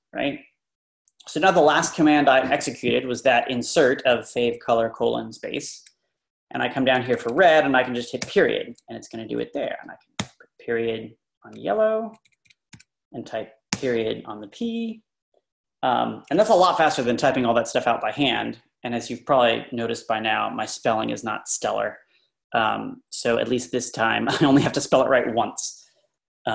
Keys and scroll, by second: 6.0 Left, 6.3 Left, 7.1 typing, 8.3-9.1 typing, 10.2 ., 11.4 Down, 11.6 Left, 12.2 Left, 13.7 ..